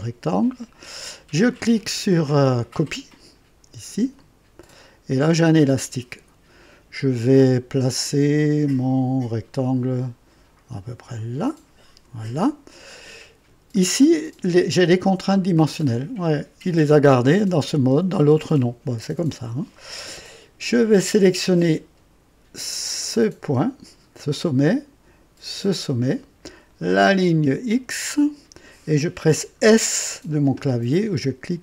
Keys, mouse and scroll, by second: 4.1 click, 11.1 click, 12.8 right click, 13.7 right click, 14.8-20.2 drag, 22.8 click, 25.7 click, 28.1 click.